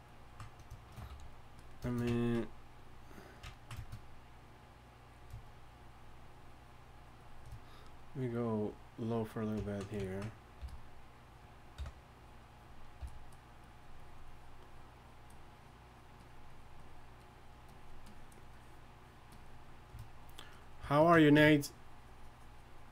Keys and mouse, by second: 0.9 shift+c, 1.1 f, 1.7 click, 1.9 click, 2.7-10.6 drag, 10.6 f, 11.8 i, 12.2-22.9 drag, 13.0 f.